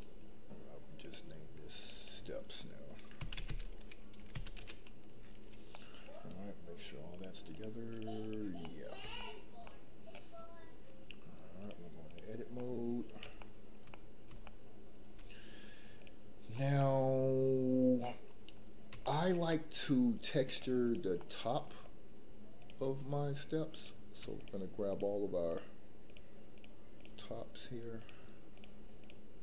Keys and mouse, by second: 1.8-4.6 drag, 5.7 middle click, 7.1 click, 7.5 click, 7.9 click, 8.2 click, 8.6 middle click, 9.0 shift+middle click, 9.6-10.1 middle drag, 11.6-12.1 drag, 12.5 middle click, 13.4 shift+middle click, 13.9 middle click, 14.4 shift+middle click, 16.7 middle click, 18.0 middle click, 19.0 shift+middle click, 19.5-20.5 middle drag, 21.1 middle click, 22.5 click, 24.3 shift+click, 26.9 shift+click.